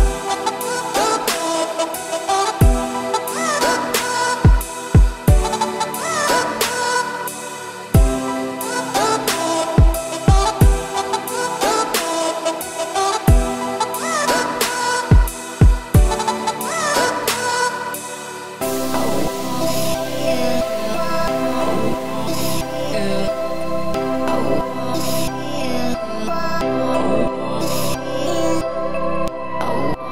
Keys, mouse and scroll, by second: 1.7-2.8 middle drag, 2.8 Tab, 3.2 2, 3.6-4.7 middle drag, 4.7 ctrl+r, 8.1 middle click, 9.0 ctrl+z, 9.2 middle click, 10.0 click, 10.6 click, 10.8-11.8 middle drag, 11.8 ctrl+click, 12.1 scroll down 2, 12.2-13.4 middle drag, 13.4 shift+click, 13.8 ctrl+click, 14.8 shift+d, 16.5 p, 17.2 Tab, 17.7 click, 18.5-18.9 middle drag, 18.9 Tab, 19.4 a, 19.9-21.2 middle drag, 21.2 `, 22.8-23.6 shift+scroll up 4, 23.0 shift+middle click, 23.6 g, 25.9-27.6 scroll down 1, 27.6-29.0 scroll up 2, 29.0 right click, 29.9 g.